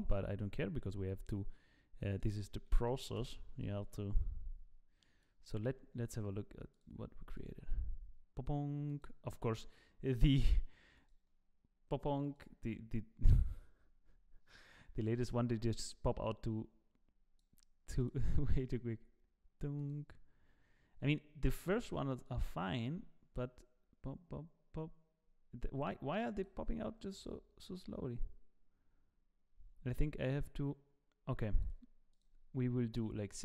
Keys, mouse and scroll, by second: 0.9 click, 2.1 click, 5.2 click, 6.7 click, 13.0 click, 15.9 click, 18.0 click, 20.9 click, 27.8 click, 32.1 click.